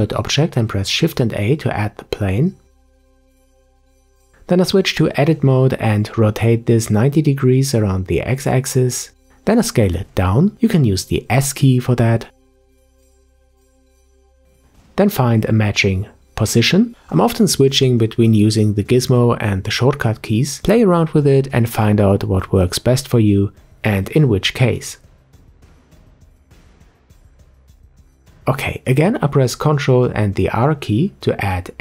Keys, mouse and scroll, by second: 0.2-0.9 scroll down 1, 0.9-1.3 scroll down 7, 1.3-2.1 middle drag, 2.1-2.5 scroll up 1, 2.5 Tab, 3.0 middle click, 3.7 Tab, 4.7 ctrl+click, 7.7-10.2 middle drag, 10.2 s, 12.9-13.9 scroll up 6, 13.9-15.1 shift+middle drag, 15.1 click, 20.0 click, 23.4 click, 25.9 click, 30.6 ctrl+r.